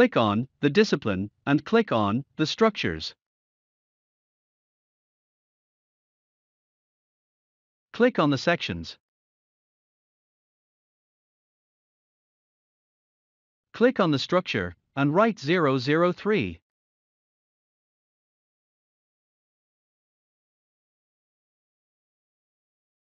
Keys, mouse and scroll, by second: 5.0 click, 18.3 click, 18.4-21.9 drag, 21.9-23.0 typing.